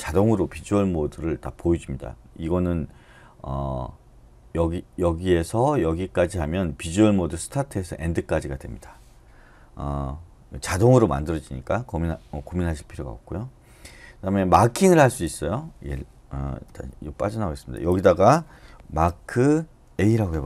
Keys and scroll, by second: 16.6 Escape, 19.0-19.8 typing.